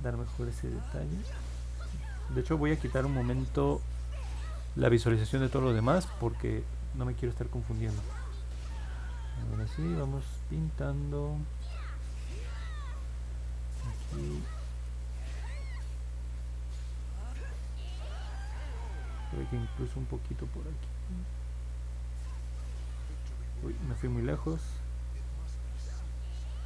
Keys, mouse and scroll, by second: 0.6-1.8 drag, 7.5 click, 7.9 click, 8.3 click, 8.7 click, 9.1-10.4 drag, 16.1 click, 19.4-23.2 drag, 24.3 ctrl+z, 25.6-26.6 drag.